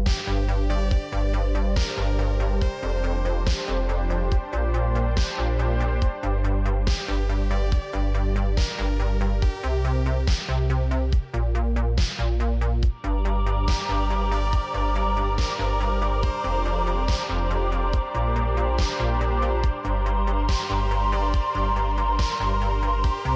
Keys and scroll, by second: 0.4 Tab, 0.9 Tab, 1.5 Tab, 1.9 Tab.